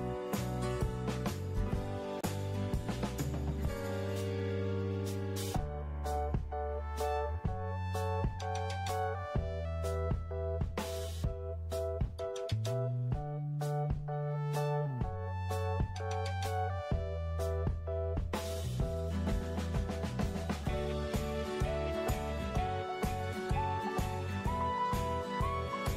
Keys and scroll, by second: 0.0-2.0 typing, 4.0-4.7 typing, 13.7 ctrl+d.